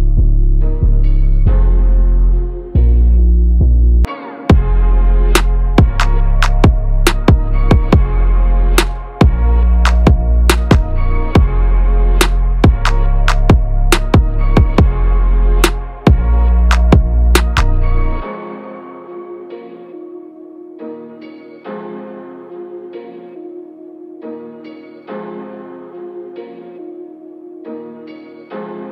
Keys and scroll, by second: 0.1 ctrl+-, 2.5 ctrl+=, 2.9 ctrl+=, 4.7 ctrl+-, 5.2 ctrl+-, 16.7 ctrl+v, 17.6 ctrl+a, 26.5 ctrl+=.